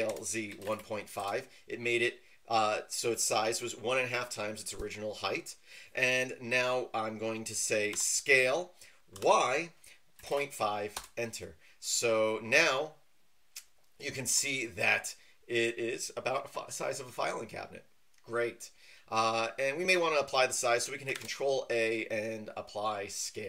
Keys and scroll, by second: 0.0-0.6 typing, 1.2 Return, 7.9 s, 9.1 y, 10.9 Return, 21.1 ctrl+a.